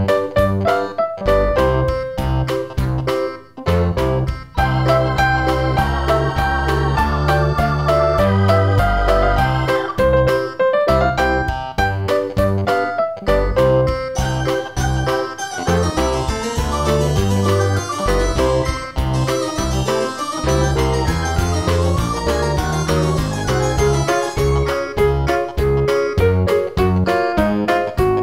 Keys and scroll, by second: 2.1 super+o.